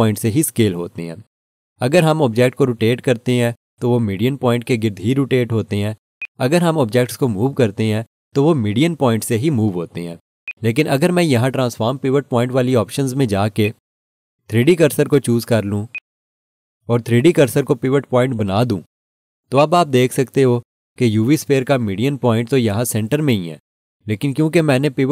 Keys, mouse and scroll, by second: 1.9 right click, 6.2 right click, 9.9 g, 10.4 right click, 13.6 click, 17.5-18.2 scroll down 1, 19.7 click.